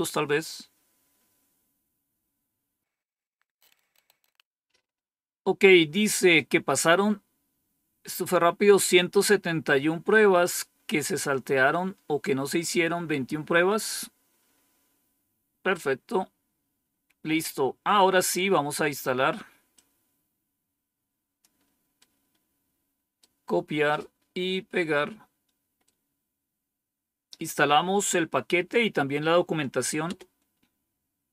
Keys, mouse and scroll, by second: 16.8-17.8 scroll down 1, 17.8-19.6 scroll down 1, 19.6-21.3 drag, 21.9-23.1 right drag, 23.4 right click, 25.7-28.0 right drag, 29.9 Return.